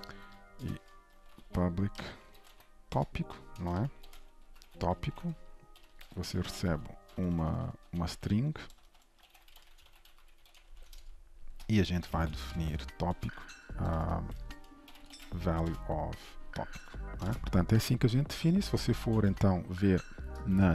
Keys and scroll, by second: 1.5 Return, 11.1 ctrl+shift+Return, 13.1 Return, 17.2 ctrl+shift+Return, 17.4 ctrl+s, 19.2 ctrl+Tab.